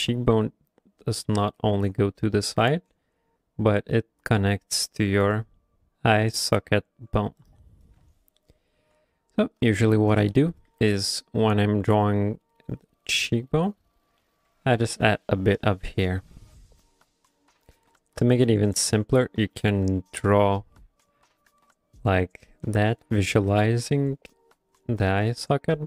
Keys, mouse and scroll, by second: 7.4 right click, 8.8 q, 9.9 ctrl+middle click, 10.4 shift+middle click, 10.7 f, 11.0 middle click, 11.9 middle click, 12.0 shift+middle click, 12.1 f, 12.7 click, 13.0 click, 13.3 middle click, 13.6 click, 13.9 click, 14.2 middle click, 14.5 f, 14.9 click, 15.3 click, 15.8 click, 16.1 click, 16.4 shift+middle click, 16.7 middle click, 16.9 f, 17.3 click, 17.6 click, 18.0 shift+middle click, 18.3 middle click, 18.5 f, 18.9 click, 19.3 click, 19.6 middle click, 19.8 f, 20.1 click, 20.6 middle click, 21.0 click, 21.5 click, 21.9 click, 22.2 middle click, 22.6 click, 23.0 click, 23.2 middle click, 23.5 f, 23.9 click, 24.1 click, 24.4 click, 24.7 click, 25.0 middle click, 25.4 middle click.